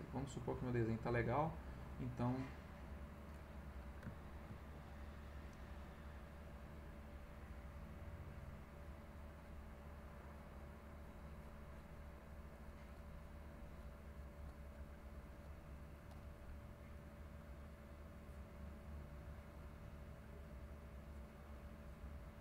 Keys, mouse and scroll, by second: 1.4 click, 2.3 click, 2.8 click, 3.5 middle click, 4.1 ctrl+middle click, 4.1-4.6 ctrl+scroll up 1, 4.9 ctrl+click, 6.6 click, 7.2 click, 7.8 click, 8.3-9.7 drag, 10.2 click, 10.9 click, 12.3-13.5 drag, 13.6-15.0 drag, 15.3 click, 15.9 click, 18.3 click, 18.7 click, 19.2 click, 21.1 click, 21.4 click, 22.2 click.